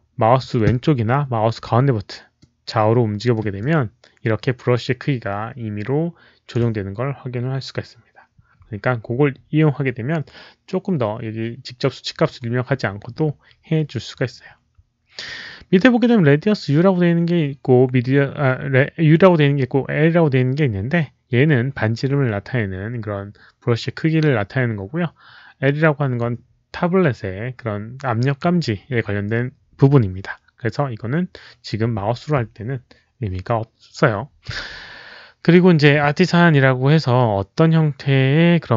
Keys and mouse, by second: 2.4-3.5 middle drag, 3.5-6.4 alt+drag, 6.4 middle click, 6.4 b, 9.5 click, 9.5 middle click.